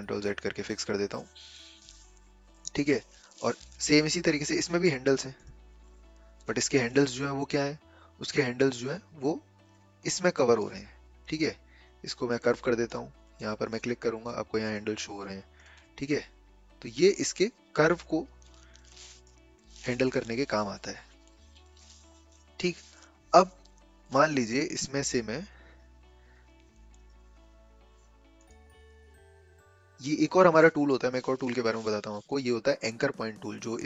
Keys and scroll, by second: 0.0 ctrl+z, 19.8 ctrl+z, 20.2 ctrl+z, 20.8 ctrl+z.